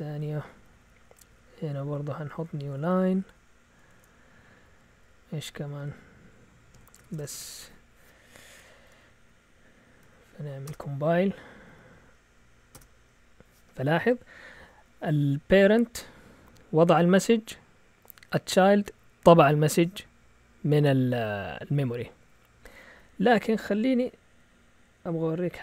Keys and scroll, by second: 1.1 typing, 2.3 Left, 2.3-7.5 typing, 3.9 Return, 6.7 Escape, 8.7 Up, 9.3 Up, 10.1 Up, 10.7 Return, 11.3-12.7 typing, 23.7 Up, 23.9-24.4 typing.